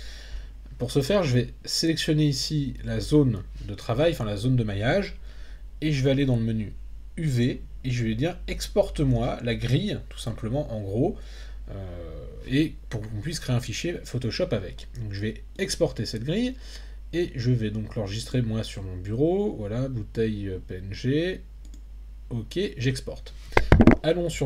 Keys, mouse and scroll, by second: 1.3-3.0 drag, 7.4-16.2 drag.